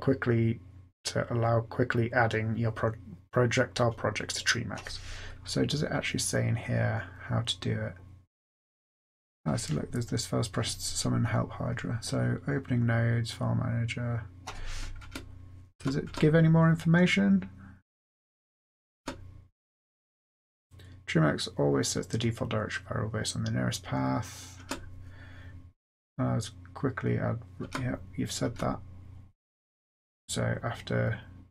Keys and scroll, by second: 15.0 Return, 15.7 Return, 16.0 Return, 18.9 Return, 24.6 Return, 27.5 Return, 28.3 Return.